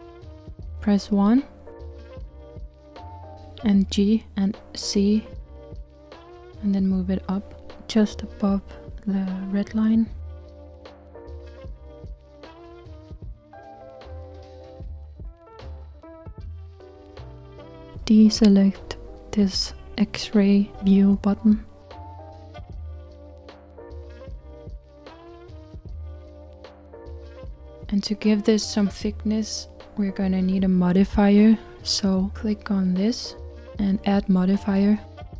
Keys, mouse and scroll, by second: 1.3 KP_1, 5.6 g, 15.7-20.5 middle drag, 20.5-22.4 drag, 25.0 click, 25.8-31.9 middle drag, 32.5 click.